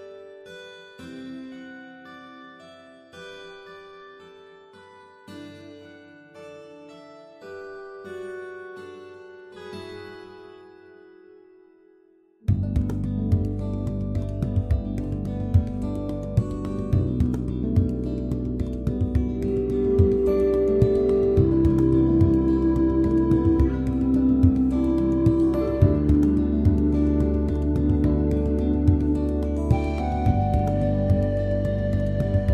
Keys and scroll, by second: 0.3 super+0, 25.0 Return, 27.2 Return.